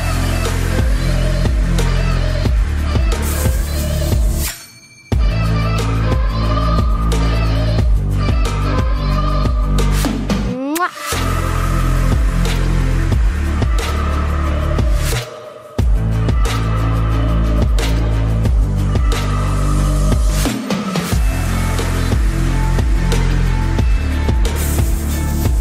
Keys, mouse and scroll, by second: 0.1 z, 0.4 middle click, 1.2 click, 2.1 KP_3, 3.6 ctrl+b, 5.3 Tab, 5.7 ctrl+s, 6.3 z, 8.2 Tab, 10.5 z, 11.4 Tab, 12.3 z, 12.6 Tab, 13.1 middle click, 17.6 a, 18.2 k, 24.8 k.